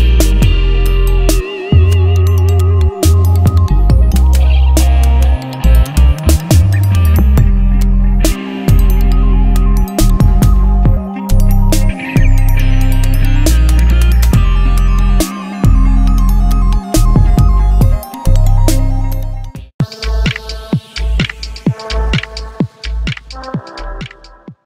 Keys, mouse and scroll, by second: 2.6-11.8 drag.